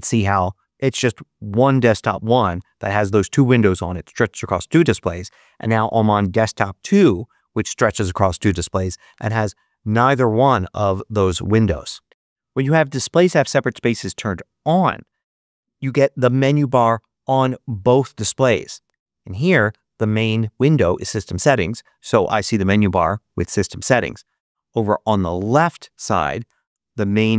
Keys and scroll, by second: 8.9 ctrl+Up.